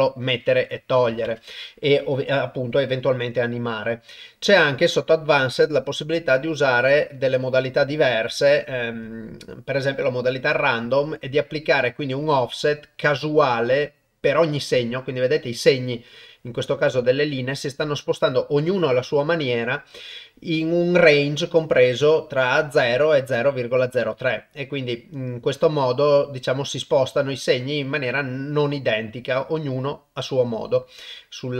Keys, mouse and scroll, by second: 0.8 click, 6.4 middle click, 7.2-9.0 drag, 11.2-17.9 drag, 23.6-30.6 drag.